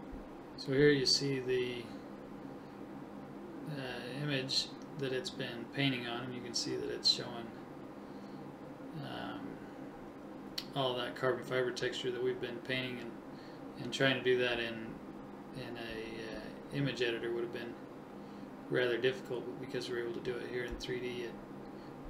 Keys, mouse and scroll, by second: 2.1 Tab, 7.5 click, 8.6 alt+h, 10.3 middle click, 11.1 right click, 11.7 middle click, 13.3 middle click, 13.6 middle click, 14.2 right click, 15.3 shift+h, 15.9 Tab, 17.1 Tab, 18.9 KP_1.